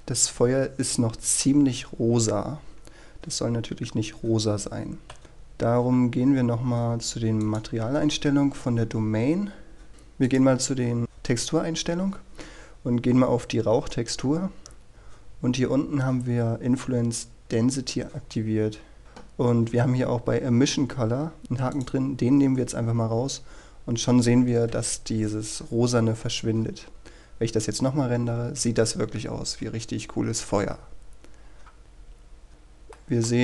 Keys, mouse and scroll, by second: 1.8-2.9 scroll down 1, 3.1-5.2 scroll up 1, 5.2 Escape, 5.6-7.5 scroll up 1, 7.5-8.6 drag, 9.9-10.4 scroll up 1, 10.4 click, 14.4-15.0 scroll down 1, 18.3-19.0 scroll up 1, 19.0 click, 23.2-24.8 scroll up 1, 24.8 F12, 31.8-32.4 scroll up 1, 32.4 scroll down 1, 32.6-33.1 scroll up 1, 33.1 middle click.